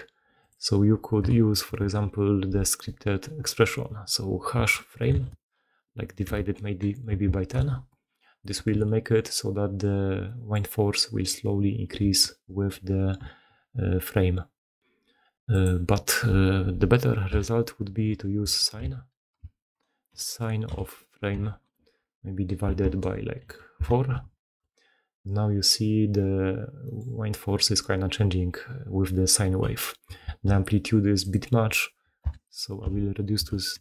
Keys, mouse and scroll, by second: 8.5 shift+space, 10.2-10.6 middle drag, 12.2 shift+space, 22.7 BackSpace, 24.4 shift+space, 26.9 middle drag, 30.2 shift+space.